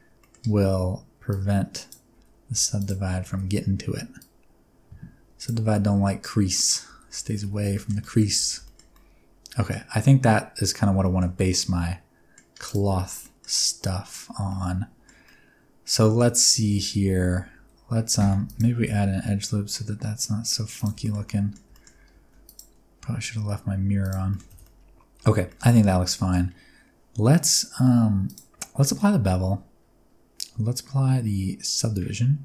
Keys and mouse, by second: 0.2 middle click, 1.4 click, 2.1 alt+z, 2.5 alt+z, 2.8 click, 3.3 alt+z, 4.2-5.5 drag, 5.7 middle click, 6.8 alt+z, 7.2 alt+z, 7.4 Tab, 7.7 shift+middle drag, 8.0 middle drag, 8.4 alt+a, 8.4 middle click, 8.6-10.9 shift+middle drag, 11.0 shift+middle drag, 11.4 middle click, 13.0 shift+middle click, 13.2 middle drag, 13.8-14.1 middle drag, 14.5-15.0 shift+middle drag, 15.2-16.2 middle drag, 16.3 click, 16.3 middle click, 16.3 right click, 16.6 Tab, 17.0 alt+z, 17.5 alt+z, 18.2 ctrl+r, 20.8 click, 21.0 middle click, 21.3 middle click, 21.8 shift+middle click, 22.2 ctrl+r, 24.0 click, 24.3 shift+middle click, 24.5 Tab, 24.6-25.2 middle drag, 25.5 shift+middle click, 25.7-26.3 middle drag, 28.3 click, 28.8 ctrl+a.